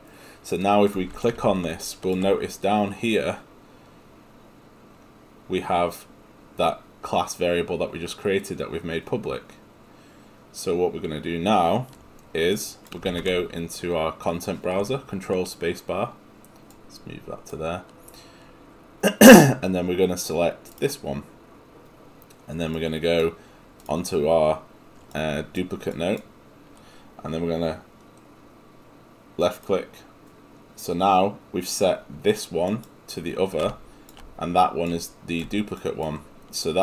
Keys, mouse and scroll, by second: 16.8 click.